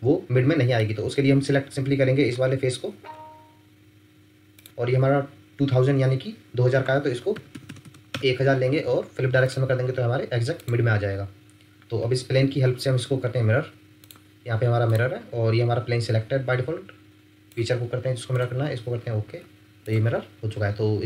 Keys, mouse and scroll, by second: 0.8 middle click, 2.3-2.8 scroll up 1, 2.8-3.4 scroll down 1, 4.6-5.8 scroll up 1, 7.3-7.8 typing, 8.1 Return, 11.1-12.6 scroll up 1.